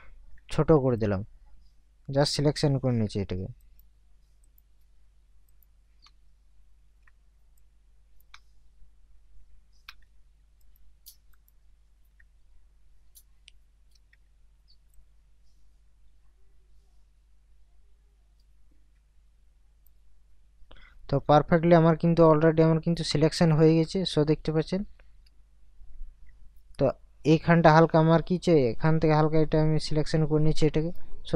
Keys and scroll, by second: 25.5 ctrl+KP_Subtract.